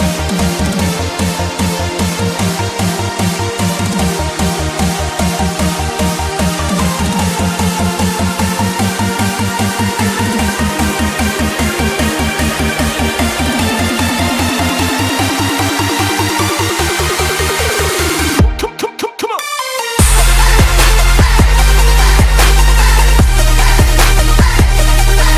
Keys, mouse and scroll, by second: 0.8 click, 1.5-2.8 typing, 3.4 click, 5.3 Tab, 5.4 F10, 5.9-7.1 drag, 9.7-10.9 typing, 12.1 click, 12.8-14.6 typing, 16.1-17.1 drag, 17.8 Tab, 17.8 F10, 18.5 click, 19.3-21.9 typing, 22.7-25.3 drag.